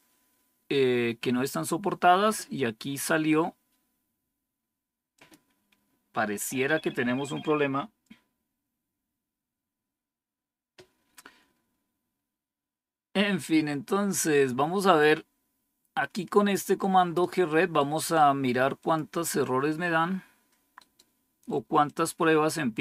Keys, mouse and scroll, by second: 5.0 click, 14.9-17.1 drag, 17.9 right click, 18.7 click, 20.7 right click, 21.8 click.